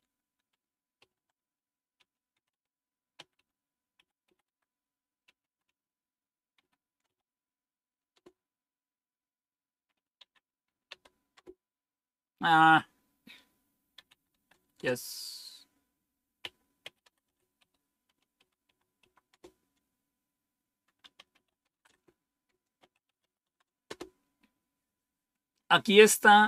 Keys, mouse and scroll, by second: 0.9-8.6 typing, 9.9-11.4 typing, 13.8-14.8 typing, 16.1-24.5 typing.